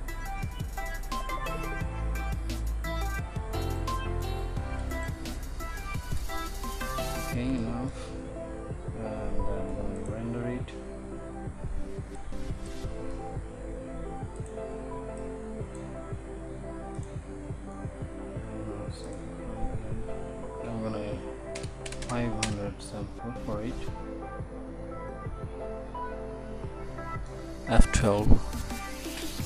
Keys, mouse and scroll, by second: 4.8 ctrl+s, 10.1-12.3 drag, 12.4-22.2 drag.